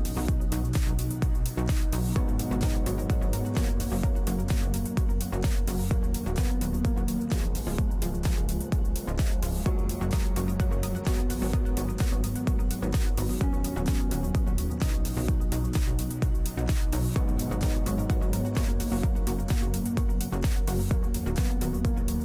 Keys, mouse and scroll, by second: 0.0 ctrl+=, 1.4 ctrl+j, 2.6 ctrl+click, 7.9 ctrl+click, 11.7 Left, 11.9 Left, 12.1 Left, 12.3 Left, 13.1 right click, 13.5 right click, 13.9 right click, 20.6 ctrl+j.